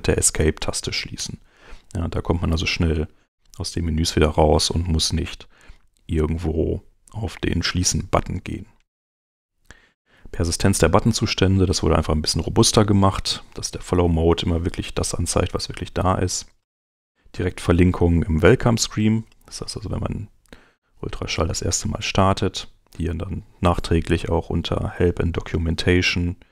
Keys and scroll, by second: 1.2 Home, 3.3 super+Tab, 18.5 super+Tab.